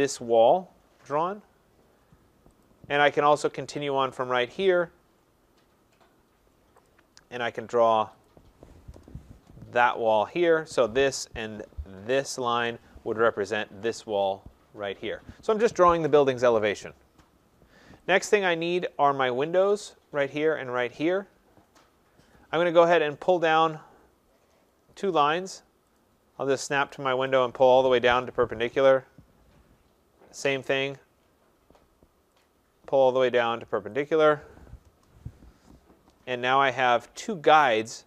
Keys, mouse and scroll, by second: 2.7 click, 4.7 click, 6.9 click, 8.3 click, 9.0 Return, 10.3 click, 12.4 shift+click, 18.1 click, 23.5 click, 24.1 middle click, 26.0 click, 27.4 click, 28.2 Return, 30.6 click, 32.5 click, 34.1 click, 35.0 Return, 35.8 middle click, 35.9 middle click, 36.0 middle click, 36.4 middle click, 36.9 middle click, 37.1 middle click.